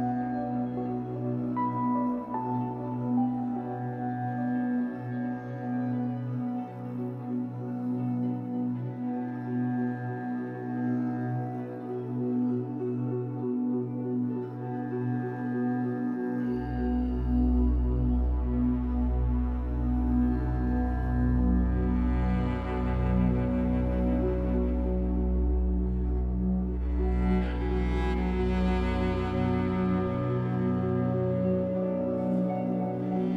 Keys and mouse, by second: 0.0 space, 0.7 space, 1.1 space, 2.1 click, 3.4 click, 4.6 click, 5.8-12.0 drag, 12.0 typing, 12.9 click, 13.6 click, 15.2 click, 16.3 click, 18.1 click, 19.4-21.4 drag, 21.0 space, 24.1 space, 24.7 ctrl+s, 25.7-29.3 alt+shift+drag, 30.7 click, 31.4 click, 32.5 click, 33.2 space.